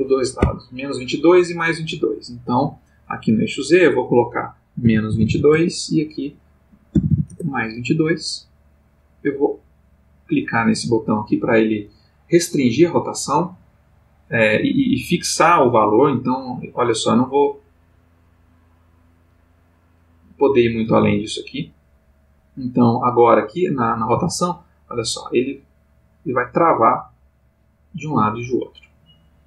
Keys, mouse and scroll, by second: 0.4 Escape, 3.2 click, 3.8 click, 4.8 -, 5.1 2, 5.5 Tab, 6.9 2, 7.3 Return, 9.3 click, 16.6-19.5 drag, 20.5 click, 21.1 Escape, 23.6 click, 24.1 r.